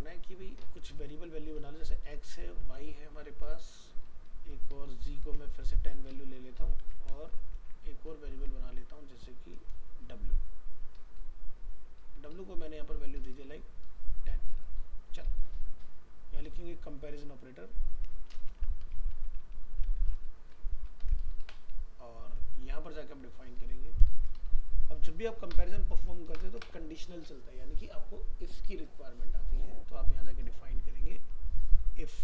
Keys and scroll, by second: 6.8 ctrl+c, 7.6 ctrl+v.